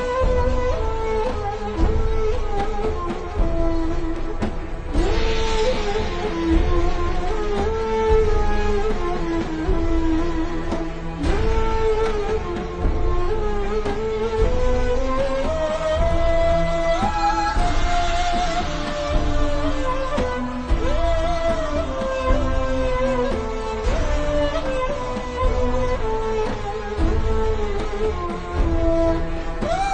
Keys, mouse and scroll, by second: 0.8-1.3 scroll down 2, 2.0 scroll down 1, 2.3-3.1 scroll up 1, 5.4 click, 5.7-6.2 scroll down 1, 9.7 alt+shift+scroll up 1, 11.9 click, 20.8-21.2 scroll down 1, 21.2 click, 25.5 alt+shift+scroll up 1, 26.1 alt+shift+scroll down 2, 27.1 alt+shift+scroll down 1, 27.7 alt+shift+scroll up 1, 28.3 alt+shift+scroll up 1, 29.0 z, 29.3 click.